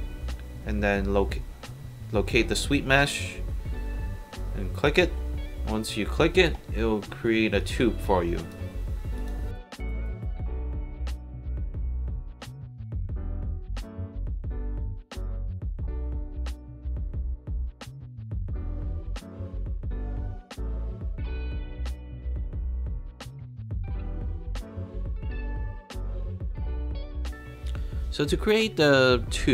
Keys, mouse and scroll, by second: 4.9 click, 6.0 scroll up 2, 7.6 click, 8.1 alt+click, 9.2 alt+click, 12.7 click, 13.5 shift+click, 15.5 shift+h, 18.6-19.4 drag, 19.6 alt+middle drag, 19.9 alt+drag, 20.3 alt+right click, 21.0-21.4 alt+drag, 22.8 alt+drag, 24.8 alt+click, 25.8 alt+drag.